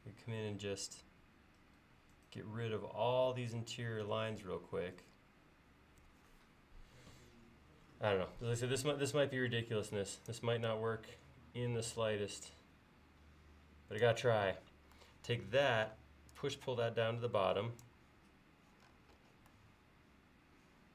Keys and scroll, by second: 15.8 p.